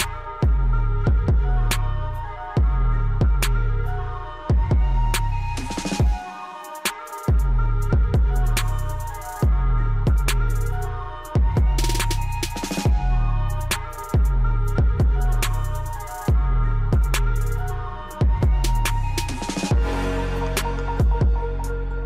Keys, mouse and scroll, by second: 14.4-14.8 scroll up 1, 15.1 click, 18.5 right click, 19.5 click, 21.9 ctrl+z.